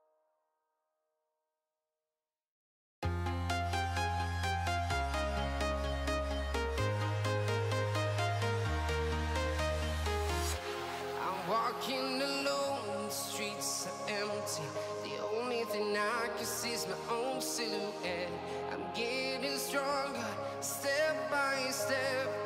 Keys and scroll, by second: 1.3 Escape, 3.5 Escape, 4.2 ctrl+x, 7.5 Escape, 13.3 Escape.